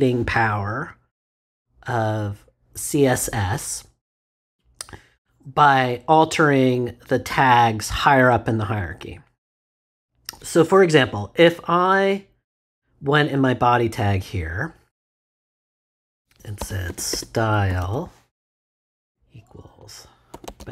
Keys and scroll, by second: 16.6-19.0 typing, 20.0-20.7 typing.